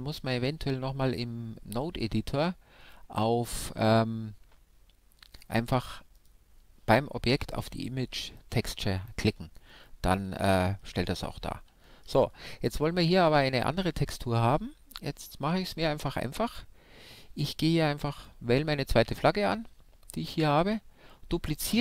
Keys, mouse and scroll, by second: 6.2-8.1 right drag, 7.6-10.2 drag, 9.7 middle click, 11.6 middle click, 11.9-15.6 middle drag, 13.2-15.6 right drag, 15.6-18.1 drag, 18.1-21.8 right drag.